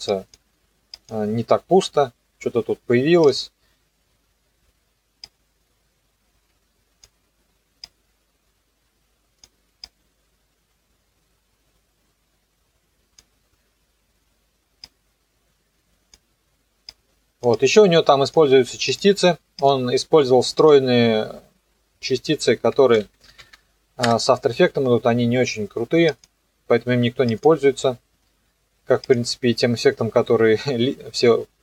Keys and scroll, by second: 22.7-23.9 typing, 24.1 Return.